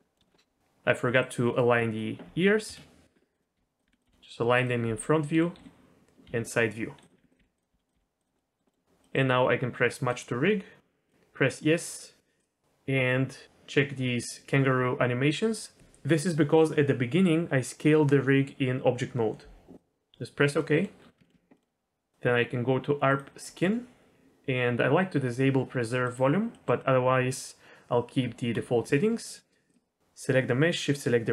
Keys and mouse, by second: 0.0 middle click, 0.2 shift+middle click, 0.3 middle click, 1.2 click, 3.3 click, 3.5 g, 3.8 r, 4.0 g, 5.6-7.9 typing, 8.3 middle click, 8.7 middle click, 9.1 middle click, 10.1-20.0 drag, 20.6 middle drag, 21.2 shift+middle click, 21.5 middle click, 23.1 click, 26.0 click, 26.5 middle click, 28.2 Tab, 29.7-30.4 shift+drag.